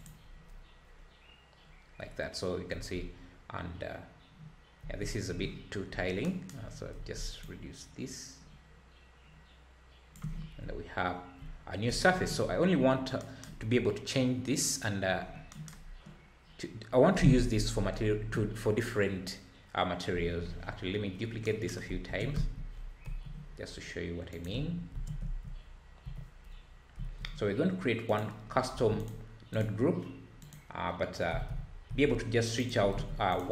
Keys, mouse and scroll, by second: 0.9-2.3 scroll down 2, 2.9 `, 5.0 `, 5.9 scroll up 5, 7.4-10.5 shift+drag, 10.6 `, 12.5-13.2 scroll down 7, 13.6-14.3 scroll down 4, 15.2 scroll down 5, 20.7-21.0 scroll down 6, 22.1 shift+d, 24.9 shift+d, 28.5 scroll up 2, 28.7 alt+a, 29.0 click, 29.5 click, 30.4 click, 31.3 g, 32.9 alt+a, 33.3 click.